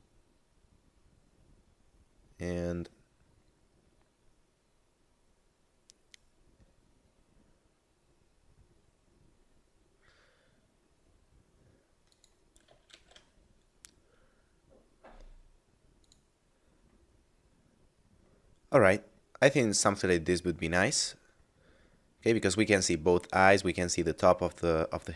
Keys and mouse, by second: 0.0 middle click, 12.2 click, 12.9 shift+f, 16.0 click, 21.8 middle click.